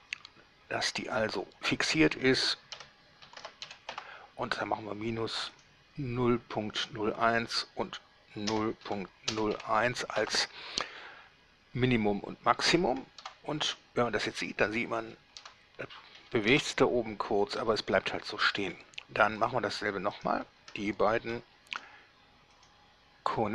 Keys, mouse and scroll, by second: 2.9 -, 3.5 ., 3.6 0, 3.9 1, 4.1 Return, 5.8 click, 8.7 KP_0, 9.0 KP_Decimal, 9.5 KP_0, 9.7 KP_1, 10.3 Return, 13.5 alt+a, 15.2 Escape, 15.6 alt+a, 16.3 Escape, 16.7 alt+a, 17.8 Escape, 19.6 right click, 20.3 shift+right click, 22.8 click.